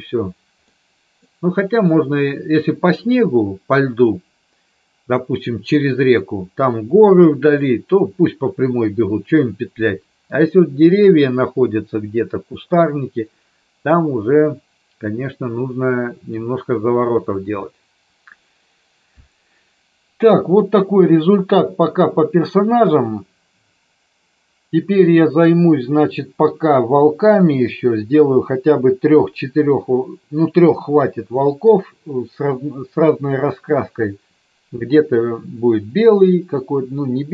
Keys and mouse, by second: 0.8-1.4 middle drag.